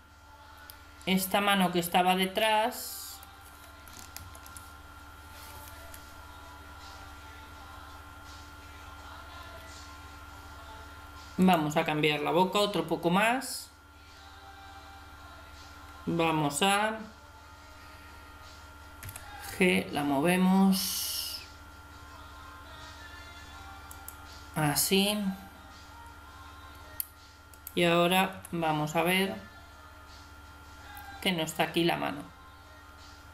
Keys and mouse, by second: 2.4-4.1 middle drag, 4.2 ctrl+KP_3, 11.4-13.2 middle drag, 19.1 g, 27.5 right click, 28.3 g.